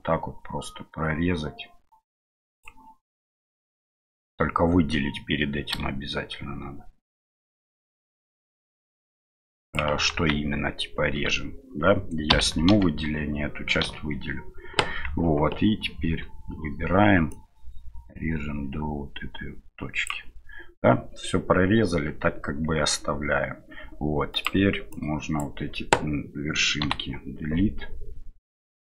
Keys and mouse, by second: 5.7 a, 7.3-9.9 drag, 10.1 ctrl+z, 12.3 a, 12.7 l, 13.8 l, 17.3-21.5 drag, 24.4-25.4 drag, 26.8 Delete.